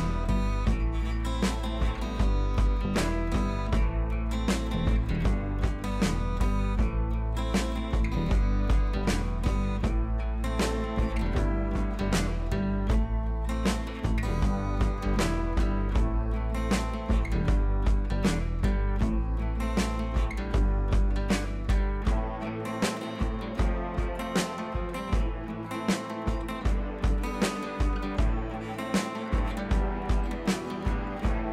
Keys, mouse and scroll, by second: 2.2-3.0 drag, 15.7-16.7 drag, 17.3-19.3 drag, 25.3-29.2 drag.